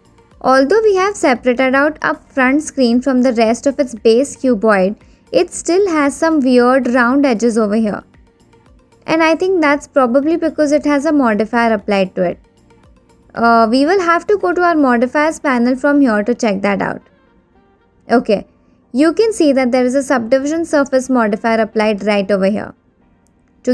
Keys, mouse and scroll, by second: 0.5 middle click, 1.3-2.3 shift+middle drag, 13.3 click, 15.5 click.